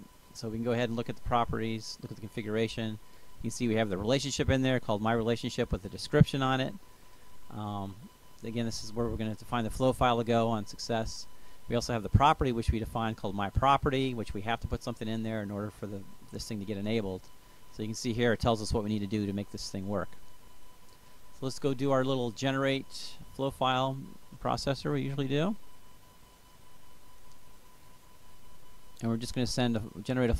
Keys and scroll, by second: 22.5-24.3 typing.